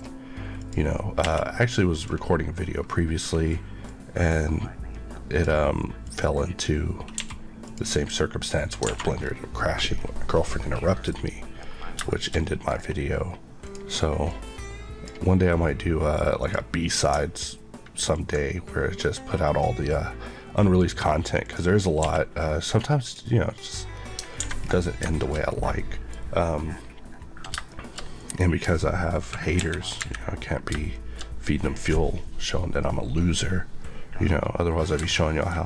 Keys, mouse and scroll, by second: 0.5 click, 1.1 q, 1.8 click, 3.0-3.8 scroll up 1, 3.8 click, 7.1 q, 7.5 click, 8.9 alt+scroll down 2, 9.5 middle click, 9.8-10.2 scroll down 1, 10.2 middle click, 12.0 middle click, 12.2-12.6 shift+scroll up 2, 13.5 click, 18.0 ctrl+click, 21.9 q, 22.9 click, 24.3 alt+a, 24.5-25.3 scroll down 3, 25.0 shift+middle click, 25.7 middle click, 26.6-27.0 scroll down 1, 27.4 shift+scroll down 1, 27.6 shift+middle click, 28.2-29.4 scroll down 1, 29.4 KP_1, 29.9 KP_3, 30.7 shift+scroll down 1, 30.8 shift+middle click, 31.3-33.0 scroll down 1, 35.1 shift+middle click.